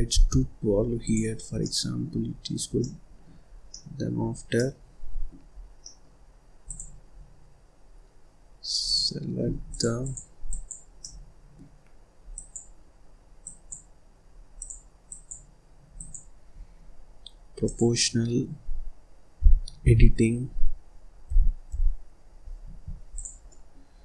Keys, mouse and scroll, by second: 1.5 middle click, 2.2-2.7 scroll up 1, 2.7 middle click, 3.4 scroll down 2, 3.6 middle click, 4.1-4.5 scroll up 1, 4.5-5.5 middle drag, 5.5 scroll down 2, 5.8 middle click, 6.6 click, 7.1-8.8 scroll up 1, 8.8 click, 10.0 click, 10.4 click, 11.0-12.3 middle drag, 12.3 click, 13.4 click, 14.5 click, 15.0 click, 17.6 click, 19.8 g, 23.1 click, 23.4 middle click, 23.9-24.0 scroll up 2.